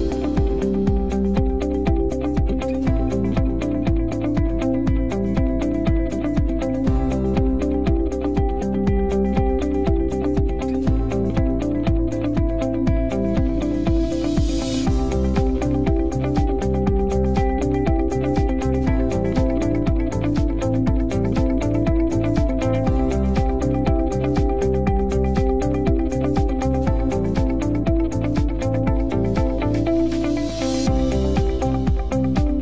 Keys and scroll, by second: 0.0-0.8 typing.